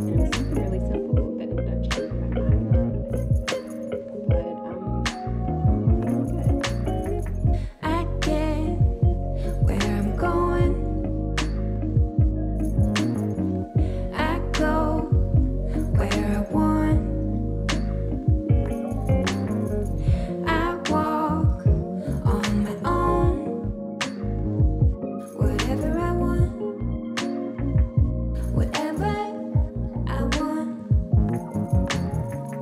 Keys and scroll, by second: 10.0 KP_4, 10.9 KP_0, 31.3 KP_0.